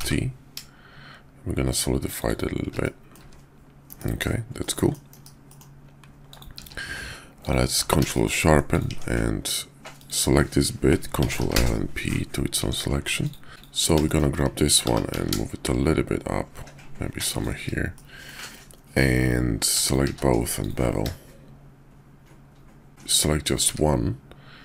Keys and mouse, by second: 2.8-3.2 drag, 3.3 `, 3.9 KP_5, 4.6-4.9 drag, 5.1 KP_5, 5.5 drag, 6.6 q, 8.1 shift+drag, 8.9 Tab, 9.9 click, 11.2 ctrl+l, 11.4 p, 12.6 Tab, 13.1 click, 13.5 ctrl+z, 13.5 click, 14.1 shift+click, 14.8 g, 17.8-18.2 drag, 19.8 shift+click, 20.0 q, 22.9 ctrl+z, 23.1 click, 23.5 `.